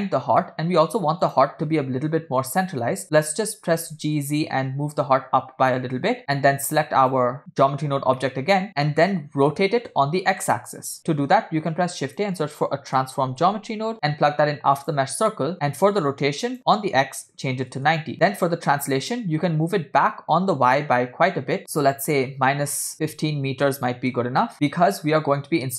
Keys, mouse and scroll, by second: 0.4-1.1 middle drag, 1.2 drag, 3.3 g, 7.1 click, 8.2 middle click, 8.5 scroll up 2, 9.4 scroll down 2, 9.6-10.0 middle drag, 11.2 shift+a, 15.3 middle click, 16.5-17.8 drag, 18.1-20.7 drag, 21.6 click, 22.9 scroll down 2, 24.5 click, 24.5 middle click, 24.5 scroll down 2.